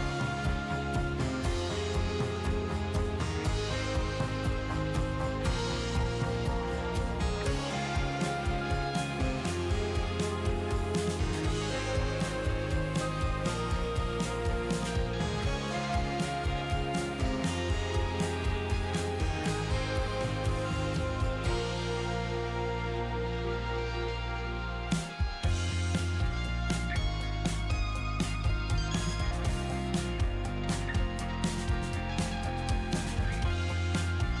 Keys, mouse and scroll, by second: 3.6-9.1 drag, 15.5-16.9 drag, 21.4-24.4 drag, 25.5-34.4 drag.